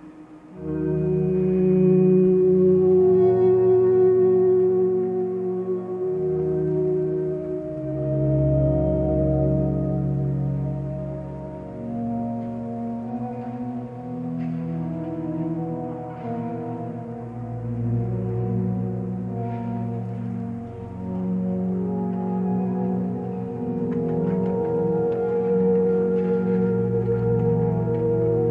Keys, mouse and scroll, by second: 1.5 ctrl+space, 3.4 ctrl+;, 6.5 ctrl+t, 11.0 ctrl+t, 13.3-15.7 ctrl+drag, 27.2 ctrl+;.